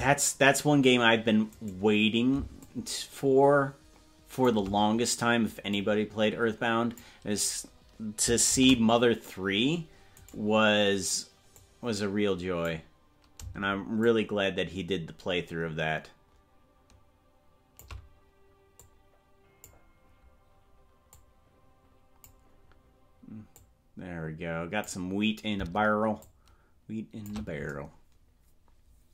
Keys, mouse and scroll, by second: 0.9 shift+d, 2.6-4.6 shift+drag, 5.7-7.1 drag, 9.6 shift+d, 11.6-12.8 drag, 14.1-18.0 shift+drag, 18.8 click, 21.2-22.4 drag, 23.6-25.0 drag, 26.2-27.4 shift+drag.